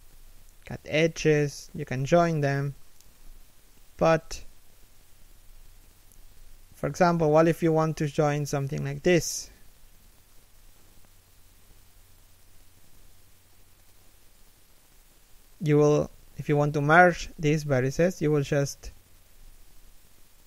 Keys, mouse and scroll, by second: 1.5 z, 1.6 scroll down 1, 2.0 middle click, 2.3 z, 2.3 scroll up 1, 2.7 z, 3.1 right click, 4.3 3, 4.6 1, 5.1 a, 5.4 alt+right click, 5.9 shift+d, 7.0 e, 8.4-11.3 typing, 8.7 middle click, 9.5 scroll up 1, 10.1 middle click, 13.0 middle click, 14.2 right click, 14.8 shift+right click, 17.7 f, 18.6 z.